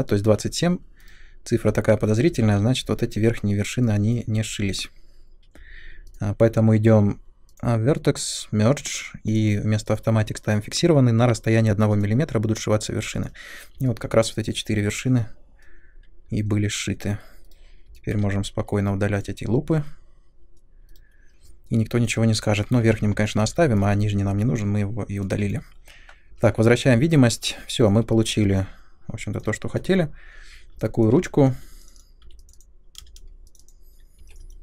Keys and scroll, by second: 1.0 Delete, 2.4 ctrl+z, 4.3 1, 14.7 3, 16.2 2, 17.4 Delete, 20.9 Delete, 22.8 ctrl+z, 26.2 u, 32.2 r, 33.0 space, 34.2 3.